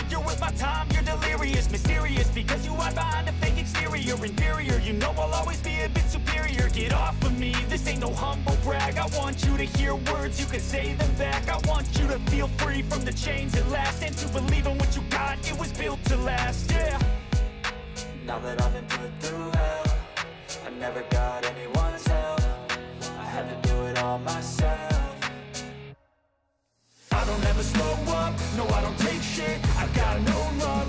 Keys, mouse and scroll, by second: 2.3 alt+click, 4.6 ctrl+b, 7.2 click, 8.2 click, 9.6 click, 10.2 click, 16.7 click, 17.7 click, 18.5 click, 21.1 alt+click, 23.4 ctrl+b, 28.0 click, 30.1 click.